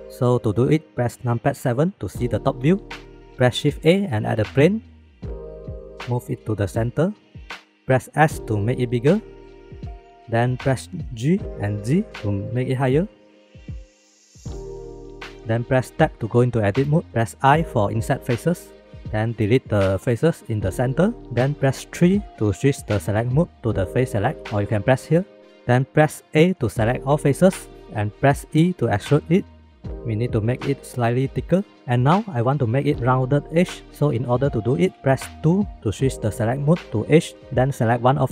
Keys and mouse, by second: 1.4 KP_7, 3.1 shift+middle click, 3.9 shift+a, 6.6 g, 8.2 s, 10.2-10.8 middle drag, 11.8 g, 13.9 shift+middle click, 14.3 shift+middle click, 16.8 Tab, 19.8 x, 21.9 3, 26.3 a, 28.4 e, 36.2 2, 37.8 shift+middle click.